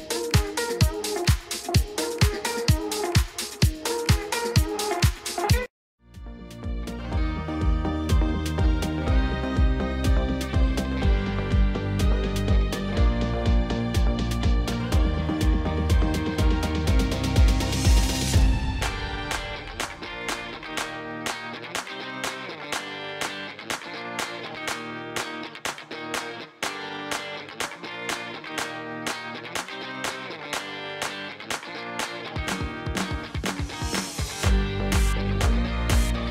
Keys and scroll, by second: 5.6 space, 26.7 ., 26.9 5, 27.2 Return, 28.5 shift+z, 30.2 shift+z, 33.7 g, 34.3 z.